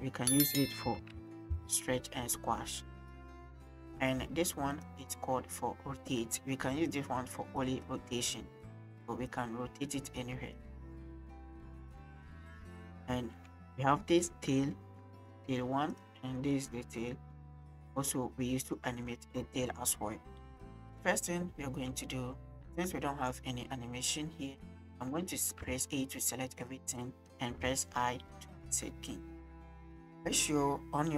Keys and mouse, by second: 0.9 s, 1.5 y, 4.7 click, 6.8 click, 7.6 click, 8.6 click, 9.3 click, 10.4 click, 12.1 click, 12.8 drag, 13.2 shift+click, 13.5 click, 14.4 click, 17.0 click, 17.4-18.1 drag, 20.9 click, 25.6 a, 26.8 click, 27.7 i, 30.0-31.1 drag.